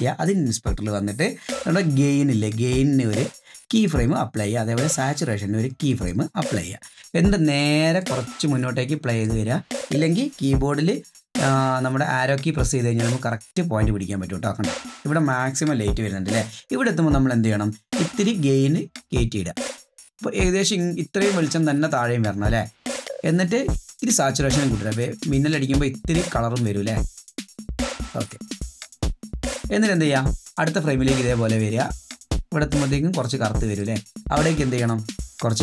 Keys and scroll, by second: 12.0 Right, 12.3 Right, 12.4 Right, 12.6 Right, 12.7 Right, 12.9 Right, 13.1 Right, 13.3 Right, 13.5 Right, 14.6 Right, 14.9 Left.